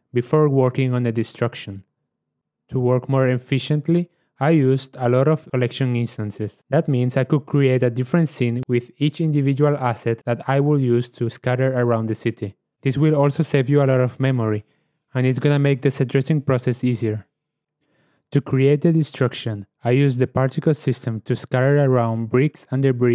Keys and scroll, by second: 0.2 ctrl+v, 0.6 ctrl+w, 5.1 KP_Decimal, 13.5 shift+a, 14.6-17.7 typing.